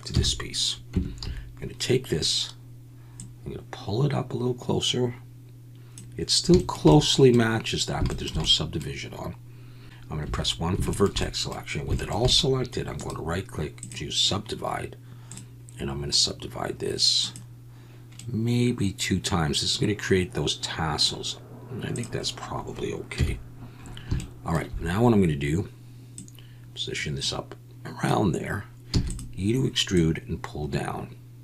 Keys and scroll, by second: 0.1 KP_1, 0.9 Tab, 1.2 a, 10.2 1, 23.1 KP_1, 28.9 e.